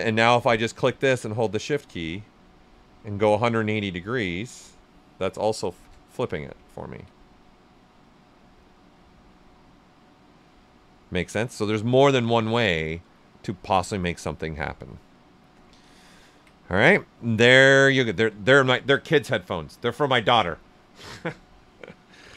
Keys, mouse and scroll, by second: 5.6-6.5 typing, 6.6 ctrl+right click, 7.5 right click, 10.2 click, 10.4 right click, 12.0 shift+f, 12.7 shift+right click, 13.0 right click, 14.6 click, 15.0 right click, 15.8 ctrl+right click, 16.9-18.3 alt+right drag, 19.5-22.3 alt+right drag.